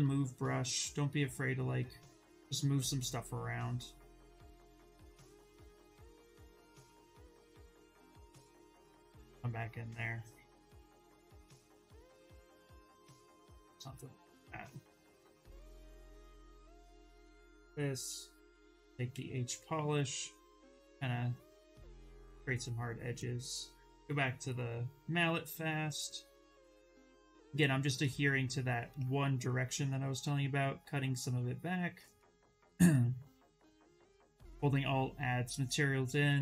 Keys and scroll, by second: 7.2 d, 8.1 s, 17.6 v, 18.8 b, 19.3 p.